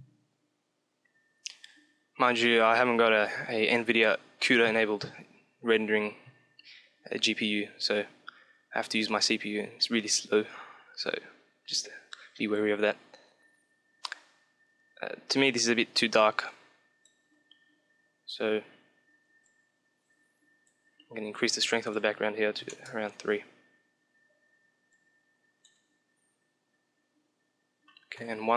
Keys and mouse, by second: 16.4-17.9 drag, 17.9-19.4 middle drag, 19.4-21.0 drag, 21.2-23.5 drag, 24.8-26.4 drag, 28.2 KP_1.